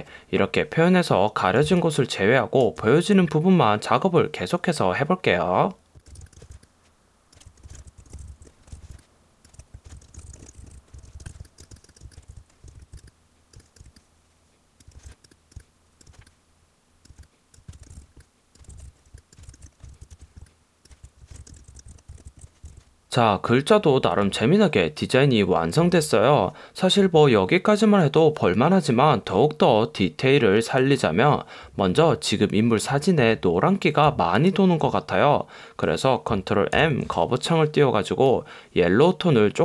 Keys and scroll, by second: 1.8 space, 5.9 space, 6.1 super+=, 6.3 space, 6.5 super+j, 7.4 Down, 7.7 super+j, 7.8 shift+Left, 8.1 shift+Up, 8.2 Down, 8.5 Right, 8.7 Down, 8.9 super+j, 9.6 Up, 9.9 super+j, 9.9 shift+Down, 10.2 shift+Left, 10.3 Right, 10.5 Up, 10.6 Right, 10.7 Up, 11.0 super+-, 11.2 super+=, 11.4 space, 11.7 space, 12.3 Left, 12.4 Down, 12.7 space, 13.6 space, 15.1 super+j, 15.6 space, 17.9 shift+Up, 18.0 Down, 18.7 Left, 18.8 Up, 19.6 shift+Down, 19.8 shift+Up, 20.0 super+-, 20.2 super+=, 21.1 Up, 21.4 super+j, 21.8 shift+Up, 21.9 shift+Left, 22.1 Right, 22.4 Left, 22.8 alt+super+0, 36.8 super+m.